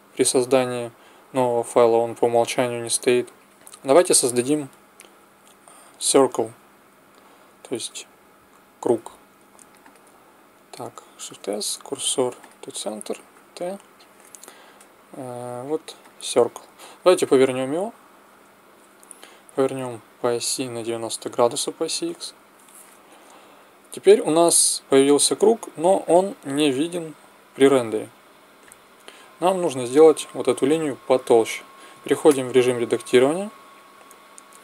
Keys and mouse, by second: 9.8-12.5 drag, 11.2 shift+s, 13.3 t, 16.0-17.8 drag, 18.4 n, 19.8-21.7 drag, 26.1-28.1 drag, 28.7-30.0 drag, 30.3 click, 32.3 Tab.